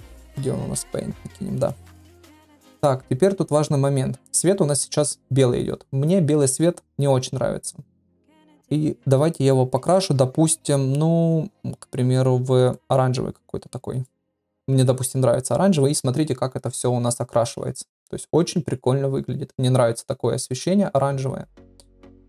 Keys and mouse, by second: 9.8 click.